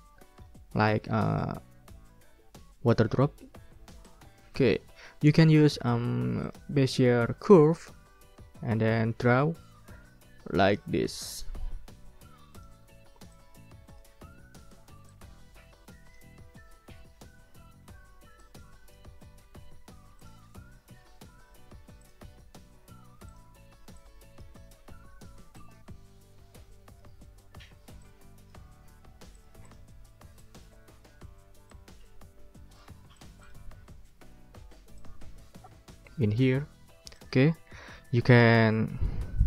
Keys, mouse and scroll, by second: 4.0 click, 4.4 middle click, 4.4 click, 6.4 click, 6.8 click, 7.5-8.0 ctrl+scroll up 4, 8.1 ctrl+scroll down 2, 8.2 ctrl+scroll up 2, 8.3 ctrl+middle click, 9.0 ctrl+scroll up 2, 12.5 click, 13.3 click, 15.0-16.3 drag, 16.3-16.8 ctrl+scroll up 2, 17.8 ctrl+scroll up 2, 18.4 ctrl+click, 20.2 click, 20.7-21.2 ctrl+scroll down 4, 22.0 click, 22.4 click, 23.3 ctrl+click, 23.5 ctrl+scroll up 2, 24.0 ctrl+click, 25.5-27.2 drag, 28.0 click, 29.3 click, 30.4 click, 31.7-33.0 drag, 33.1 click, 33.8 ctrl+scroll down 2, 35.0 click, 35.3 ctrl+click, 37.1 click, 37.5 click, 37.8 middle click, 38.0 ctrl+click, 38.3-39.3 ctrl+scroll up 4, 39.3 ctrl+middle click.